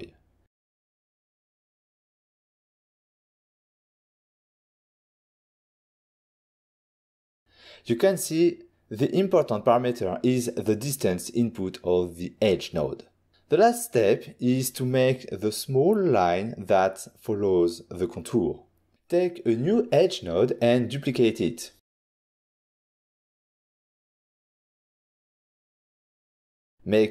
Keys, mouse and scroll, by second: 0.9 3, 1.3 Return, 3.5 ctrl+middle click, 5.1 ctrl+middle click, 6.5 middle click, 7.1 scroll down 1, 7.5 middle click, 7.6 middle click, 7.8 ctrl+shift+click, 8.4 middle click, 8.6 middle click, 8.7 ctrl+middle click, 9.2 shift+click, 14.4 shift+right click, 17.4 ctrl+middle click, 19.5 shift+d, 20.5 click, 21.0 middle click, 21.1 middle click, 21.3 click, 22.9 click, 23.8 ctrl+shift+click, 24.0 middle click, 24.0 click, 24.7 shift+d.